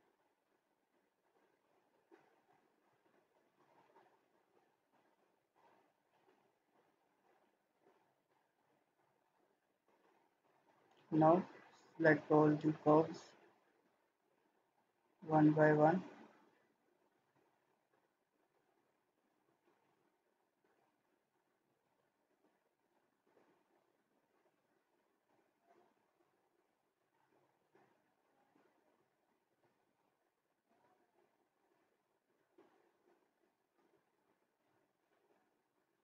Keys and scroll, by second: 3.8 ctrl+z.